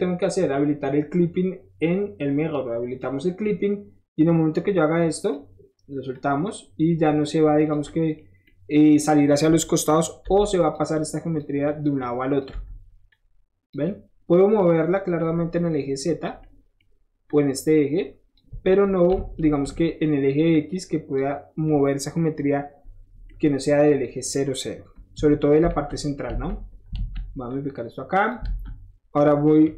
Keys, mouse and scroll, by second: 2.9 click, 4.2-5.3 drag, 6.1-7.2 drag, 7.7 click, 7.8 middle click, 8.3 scroll up 1, 8.5 middle click, 10.3 7, 10.5 drag, 10.9-11.4 drag, 11.6 drag, 12.0-12.4 drag, 13.1-13.7 drag, 14.4-16.3 drag, 17.3-18.3 drag, 19.4 ctrl+z, 19.8 middle click, 20.5 click, 23.3-24.3 middle drag, 25.7 z, 26.3 alt+z, 26.9 alt+z, 27.5 click, 28.4 alt+z, 28.8 middle click.